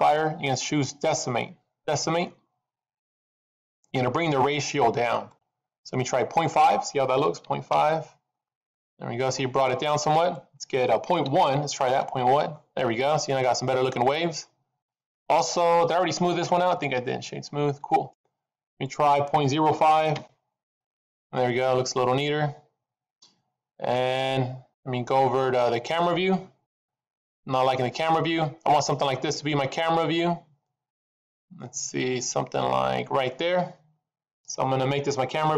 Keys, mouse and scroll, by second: 4.9 middle click, 6.2 click, 8.6 middle click, 10.2 click, 12.7 middle click, 13.4-13.9 scroll up 2, 13.9 middle click, 16.1 right click, 18.7 click, 20.9 middle click, 26.6 KP_0, 27.9 middle click, 30.3 scroll up 2, 30.9 middle click, 32.3 scroll up 1.